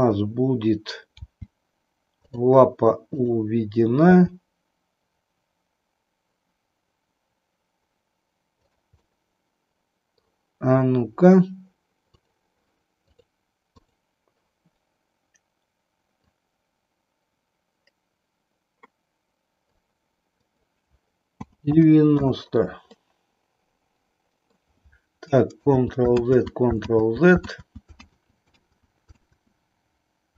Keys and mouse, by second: 0.0 KP_1, 1.2 g, 3.1 click, 4.1 g, 9.0-10.3 middle drag, 13.1 click, 13.8 click, 16.2-19.7 drag, 20.5-22.3 drag, 22.8-24.6 middle drag, 25.6 ctrl+z.